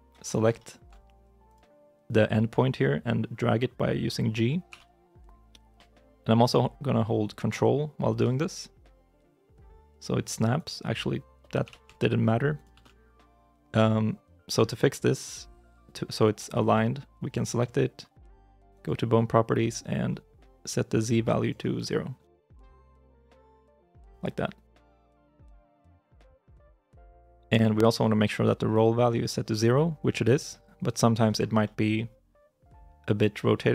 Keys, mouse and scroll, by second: 0.1 scroll up 1, 0.4 shift+middle click, 10.4 ctrl+click, 11.5 g, 12.4 ctrl+i, 12.6 ctrl+z, 17.2 right click, 25.0 right click, 25.5 g, 25.6 y, 31.5 middle click, 31.9-33.7 scroll down 1.